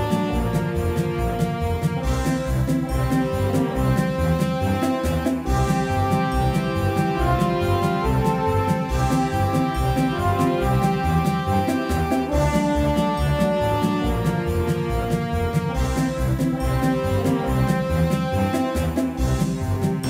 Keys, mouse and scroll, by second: 4.0-6.3 drag, 11.0-16.6 drag, 18.0-20.0 drag.